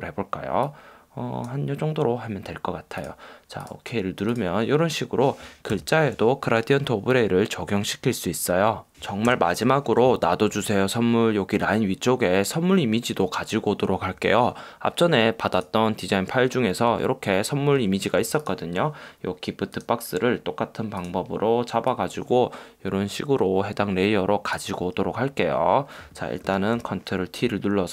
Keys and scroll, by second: 5.9 super+-, 9.3 super+=, 26.6 super+t.